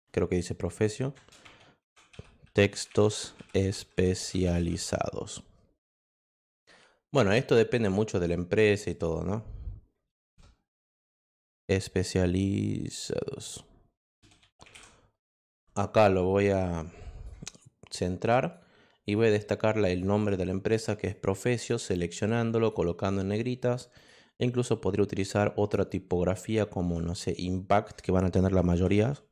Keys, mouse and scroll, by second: 1.1 shift+Return, 2.1-5.2 typing, 7.3 click, 8.9 click, 10.0 BackSpace, 13.7-15.1 typing, 16.6 click, 18.4 click, 19.0 click, 19.5 click, 20.7 click, 21.1 click, 22.6 click, 23.9 click, 28.6 i, 29.0 m.